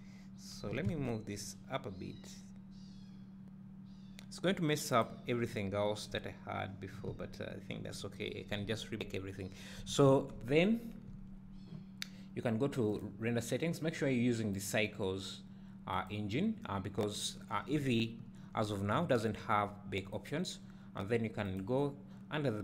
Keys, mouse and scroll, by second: 0.8 g, 5.0 click, 5.5 `, 6.4 scroll up 1, 7.1 `, 9.9 a, 10.7 Tab, 16.3-16.8 drag, 17.4-17.8 scroll down 2, 17.8 `.